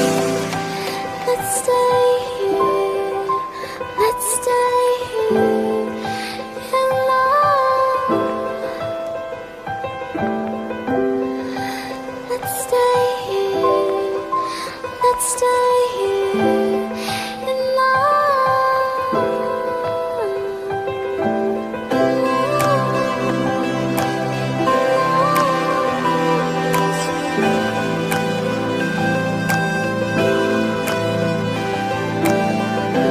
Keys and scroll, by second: 4.1 ctrl+z, 6.2 ctrl+t.